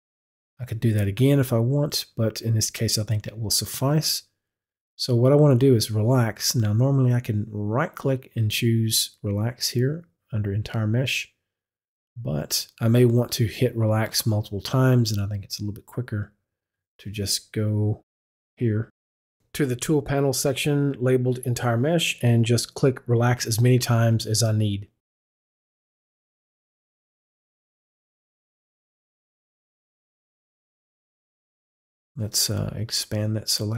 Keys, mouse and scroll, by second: 7.7 click, 7.9 right click, 18.1 right click, 18.2 click, 22.4 click, 26.0 click, 28.4 click, 33.0 click.